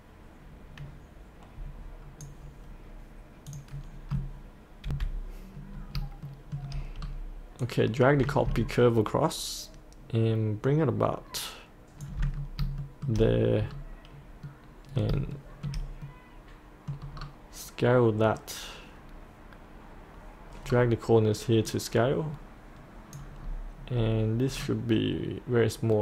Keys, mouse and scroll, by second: 3.8-4.9 scroll up 1, 4.9 F8, 5.7-6.0 scroll up 1, 6.3 shift+middle click, 7.0-7.6 scroll down 1, 7.6-12.3 drag, 12.8 shift+middle click, 13.7-14.5 scroll down 1, 14.5 middle click, 15.3 shift+middle click, 16.0 middle click, 17.2-20.7 scroll down 1, 21.7 click, 23.4-24.5 scroll up 1, 24.5 scroll down 1.